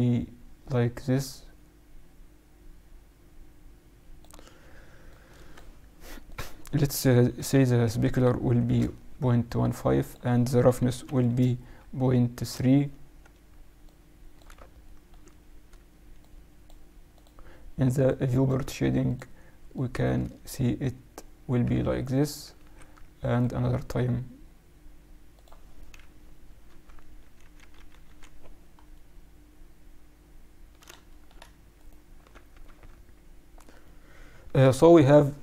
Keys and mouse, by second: 5.0-8.1 drag, 10.0-11.8 drag, 13.8-15.7 drag, 15.7 click, 16.1-20.8 drag, 22.5 ctrl+r, 25.9 KP_Subtract, 26.6 Tab, 27.1 KP_Subtract, 28.9-30.5 middle drag, 31.2 middle click, 31.4 middle click, 31.5 middle click, 31.7-33.4 right drag, 32.2 Tab, 32.6 Tab, 33.8 middle click.